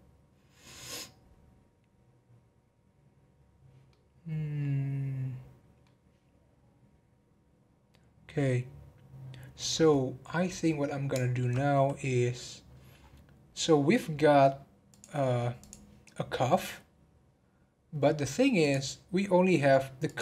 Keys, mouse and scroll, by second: 3.9-7.0 middle drag, 9.7-12.5 middle drag, 12.5-13.1 scroll down 11, 15.5 scroll down 3, 15.6 click, 16.0 scroll up 2, 17.2 scroll down 1, 18.0-18.6 scroll down 4, 18.6 click.